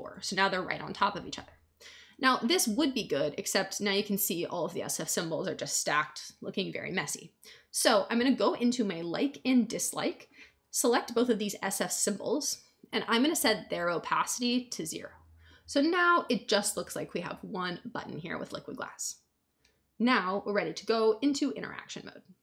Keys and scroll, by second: 0.0 Return.